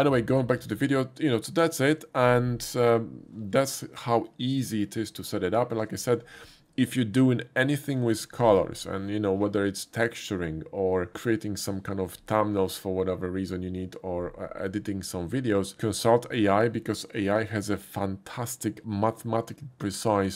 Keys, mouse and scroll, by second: 1.9 typing, 4.3 middle click, 5.4 shift+middle click, 18.6 typing.